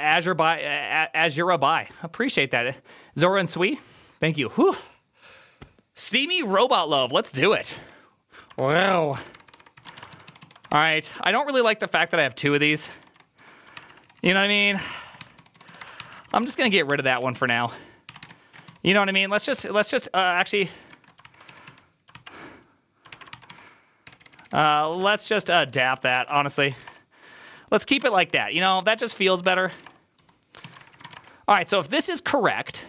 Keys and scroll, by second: 8.3-21.5 typing, 9.2 ctrl+d, 9.3 ctrl+d, 10.5 ctrl+c, 16.7 ctrl+n, 17.0 ctrl+c, 20.8 ctrl+^, 21.1 ctrl+c, 22.0 ctrl+c, 23.0 ctrl+r, 23.1-31.5 typing, 26.5 ctrl+:, 26.7 Return, 32.5 ctrl+u.